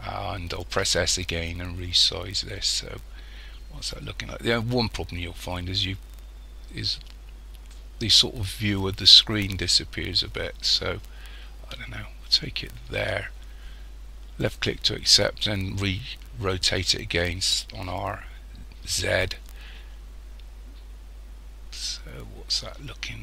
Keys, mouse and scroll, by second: 0.8 s, 17.8 r.